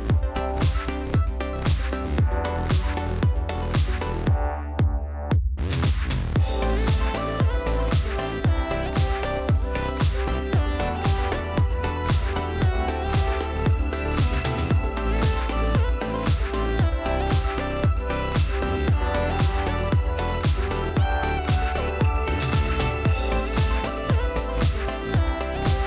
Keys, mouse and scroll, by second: 0.3 click, 1.0 click, 2.5 shift+click, 6.4-7.4 drag, 7.5 ctrl+z, 8.4 click, 9.3-9.8 ctrl+scroll up 2, 10.6-11.1 scroll up 2, 11.3 click, 12.6 click, 13.2-13.7 ctrl+scroll up 2, 14.8 shift+click, 16.1 shift+click, 17.2 click, 18.6-19.0 ctrl+scroll down 2, 20.6 click, 22.1 click, 23.0 middle click, 24.0 shift+click, 25.6 shift+click.